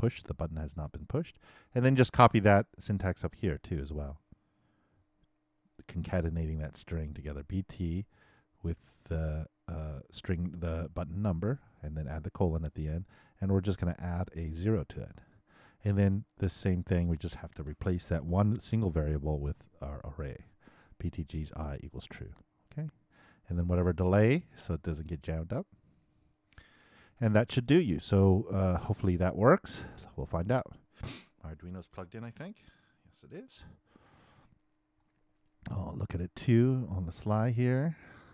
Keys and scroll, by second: 4.9 shift+super+c, 6.4 shift+super+v, 18.0 shift+super+c, 20.1 shift+super+v, 26.6 shift+super+s.